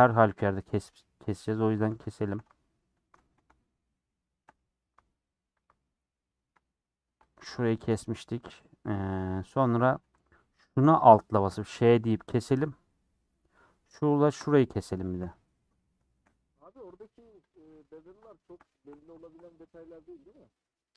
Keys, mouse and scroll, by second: 1.1-3.0 middle drag, 3.0 alt+click, 3.4 scroll down 2, 3.6-5.6 shift+middle drag, 5.6 alt+click, 6.1-8.1 middle drag, 8.1 alt+click, 8.9 middle click, 9.3 scroll up 1, 11.5 ;, 12.0 middle click, 12.9 middle click, 13.6 Left, 15.1 ctrl+Left, 15.6 scroll down 4, 15.7 middle click, 16.7 scroll up 2, 17.5 click, 18.7 shift+middle click, 18.9 scroll down 3, 19.2 shift+middle click, 19.6-20.5 scroll up 7, 20.1 middle click.